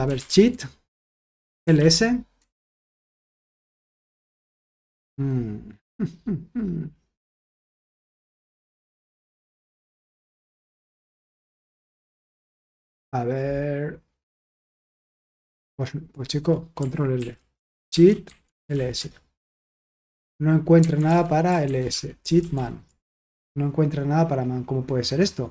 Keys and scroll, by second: 0.0-2.2 typing, 2.3 Return, 17.1 ctrl+l, 17.3-19.2 typing, 20.5-23.0 typing.